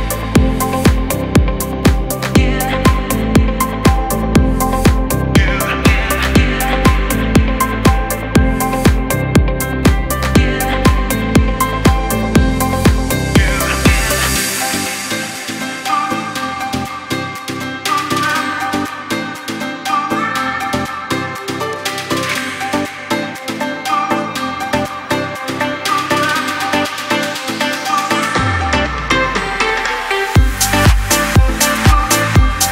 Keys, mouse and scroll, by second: 3.5 scroll up 2, 4.8 alt+scroll up 1, 5.3 typing, 6.3 alt+scroll up 3, 8.0 click, 8.8 ctrl+z, 9.4-11.5 drag, 11.5 alt+scroll down 1, 12.8-14.4 shift+drag, 14.8 alt+scroll down 1, 15.7 u, 16.6 click, 16.9-18.1 scroll up 1, 18.1 Return, 19.3 click, 19.7-20.4 scroll down 1, 20.4 Return, 21.2 click, 21.5 alt+scroll down 1, 23.2 click, 23.9 alt+scroll down 1, 24.3 space, 24.5 click, 24.8 space, 25.1 click, 25.3 space, 26.0 click, 28.0 click, 29.6 click, 30.3-32.7 drag.